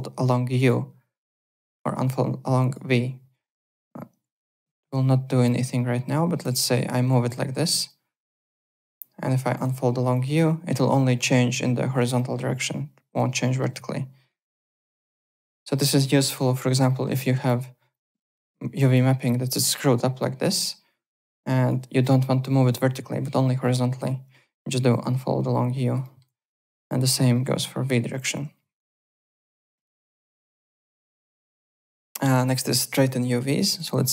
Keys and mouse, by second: 0.5 click, 1.7 click, 2.6 click, 3.4 w, 3.6 click, 4.4 click, 5.4 click, 6.4-7.3 typing, 7.1 click, 7.8 click, 8.7 w, 9.5 click, 10.1 click, 10.6 click, 12.1 alt+middle click, 13.4 alt+middle click, 14.2 alt+right click, 14.4 alt+click, 15.5 click, 15.7-16.7 typing, 16.8 alt+middle click, 17.2 click, 17.9 click, 18.7 click, 20.6 alt+click, 24.9 click, 25.7 alt+right click, 26.0 alt+middle click, 29.0 alt+middle click, 29.3 alt+right click, 29.8 alt+Tab, 30.6 alt+click, 31.8 alt+Tab, 32.4 click, 33.2 4, 33.5 click, 33.9 e.